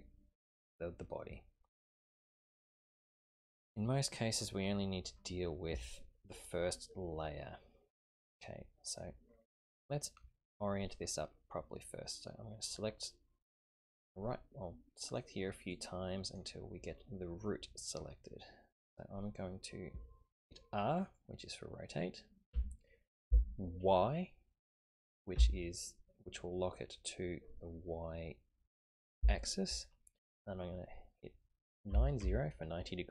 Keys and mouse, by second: 3.4 click, 7.9 right click, 8.9 right click, 15.1 click, 15.7 click, 16.3 click, 22.5 r.